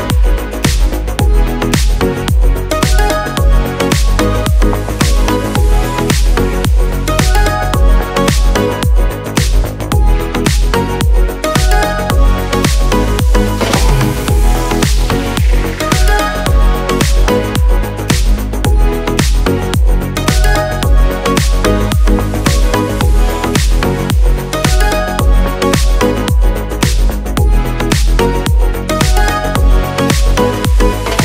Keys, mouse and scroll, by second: 6.0-23.8 drag, 28.4 click.